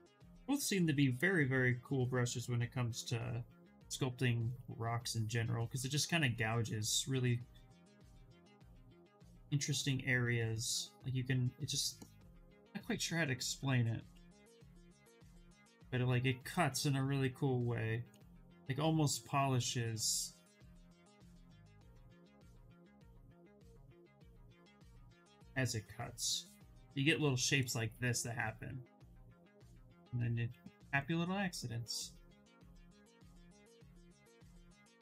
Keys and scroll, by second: 12.5 ctrl+z, 12.9 ctrl+z, 13.4 s.